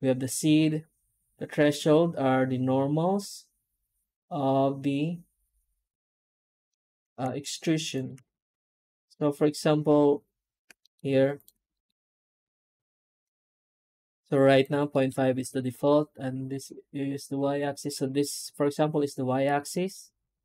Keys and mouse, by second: 6.6-7.1 middle drag, 7.3 shift+middle click, 7.9 shift+click, 11.4 Tab, 11.6 middle click, 12.3 alt+a, 12.8 ctrl+alt+shift+right click, 14.8 shift+middle click, 15.4 3, 18.0-20.4 right drag.